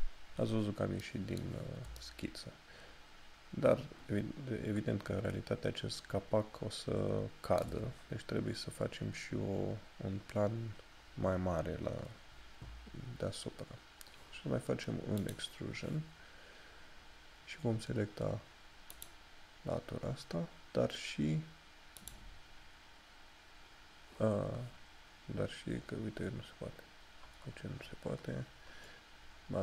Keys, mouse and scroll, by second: 10.3 scroll up 1, 15.3 click, 19.1 click, 22.4 click, 27.6 scroll up 1.